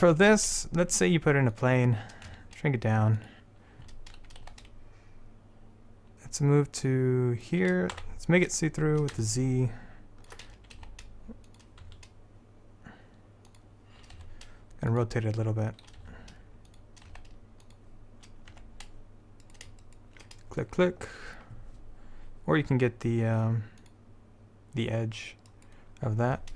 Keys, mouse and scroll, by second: 0.3 shift+a, 2.4 s, 4.5 g, 8.1 z, 9.4 middle click, 9.8 middle click, 10.9 g, 12.0 s, 14.3 r, 16.1 r, 17.2 g, 18.7 Tab, 19.6-21.9 drag, 23.9-25.6 drag.